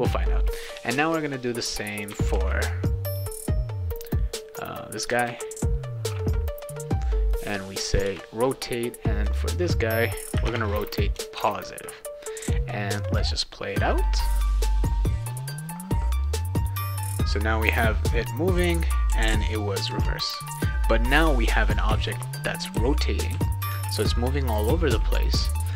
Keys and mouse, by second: 1.2-2.0 drag, 2.3 ctrl+c, 3.2-5.0 drag, 5.2 ctrl+v, 7.9 click, 8.0 Return, 9.2 click, 10.4 BackSpace, 11.3 ctrl+s, 12.4 click, 16.6 click, 17.3-19.9 typing, 22.7 d, 23.3 d, 24.6 d, 25.3 d.